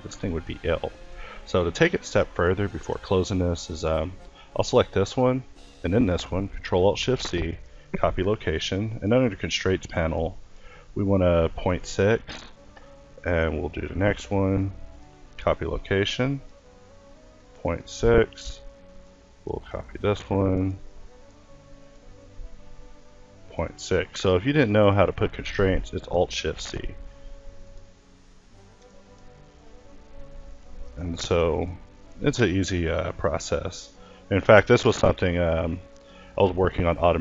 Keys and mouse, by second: 0.1 Escape, 1.4 ctrl+s, 2.6 a, 2.9 a, 6.1 ctrl+s, 12.0 a, 12.5-13.9 drag, 13.9 ctrl+s, 15.7-17.6 drag, 17.7 a, 18.7 click, 19.5 ctrl+s, 21.2-23.9 drag, 23.9 a, 25.4 ctrl+s, 29.0 a, 30.6 ctrl+s, 34.2 a, 35.1-36.2 drag, 36.2 ctrl+s.